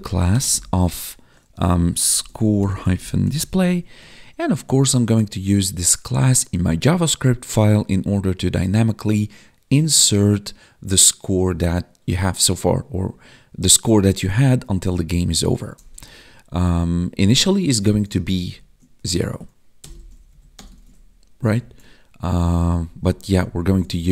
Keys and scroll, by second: 3.9 Tab, 17.7 Right, 18.2 ctrl+Right, 18.9 Right, 19.9 ctrl+s, 20.2 Right, 20.7 ctrl+s, 21.4 Left, 22.4 ctrl+Left, 23.2 ctrl+Right, 23.4 ctrl+Left, 23.5 ctrl+Right, 23.6 ctrl+Left.